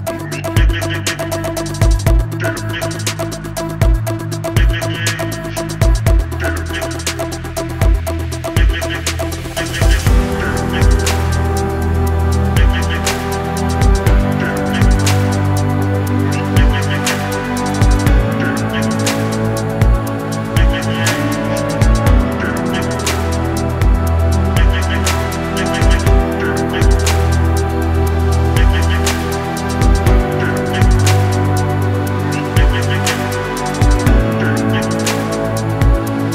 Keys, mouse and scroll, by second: 0.0 click, 1.0 click, 4.4 middle click, 5.7 click, 6.7 click, 7.9 click, 8.9 middle click, 10.2 middle click, 14.3 click, 14.8-16.4 middle drag, 20.3 click, 20.8-21.9 scroll down 1, 21.9-22.6 scroll down 1, 22.6 click, 22.8-23.3 scroll down 2, 23.6 click, 26.5 click, 27.7-28.2 middle drag, 28.4 scroll down 2, 29.6 scroll down 1, 29.7-30.1 drag, 31.7 click, 33.9-34.8 middle drag, 35.4 click.